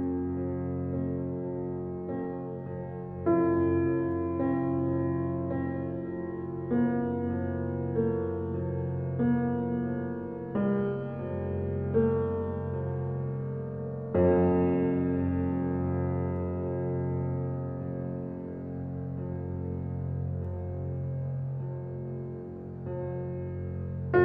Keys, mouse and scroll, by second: 0.0 g, 1.3 alt+middle click, 1.9 scroll up 1, 2.1-2.4 shift+middle drag, 2.4-2.9 shift+scroll up 1, 2.9 g, 4.8 g, 6.7 g, 8.1 alt+middle click, 9.4 click, 10.2 click, 12.0 g, 13.3 click, 13.9 KP_0, 18.9-20.9 scroll down 3.